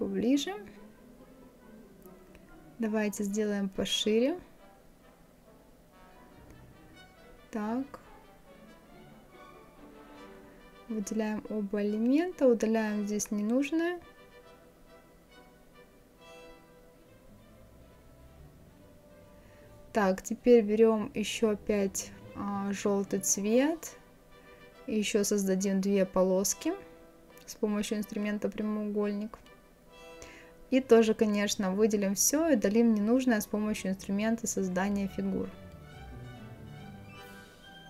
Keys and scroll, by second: 26.8 ctrl+z.